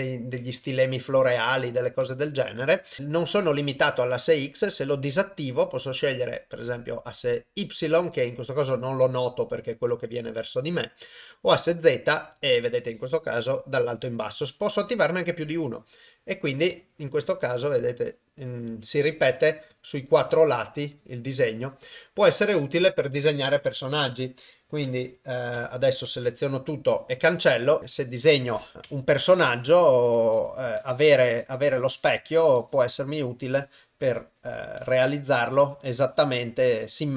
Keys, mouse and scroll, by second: 0.4 click, 1.1 click, 2.0 click, 16.7 click, 18.1 click, 19.3 click, 19.7 click, 20.3 click, 20.9 click, 21.4 click, 24.9 Tab, 25.6 a, 26.2 x, 28.8 Tab, 29.3 click, 30.1 click, 30.1 click, 30.8 click, 31.2 click, 31.6 click, 32.3 click, 32.6 click, 33.1 click, 33.4 click, 33.7 click, 34.0 click, 34.8 click, 35.6 click, 35.9 click, 36.7 click.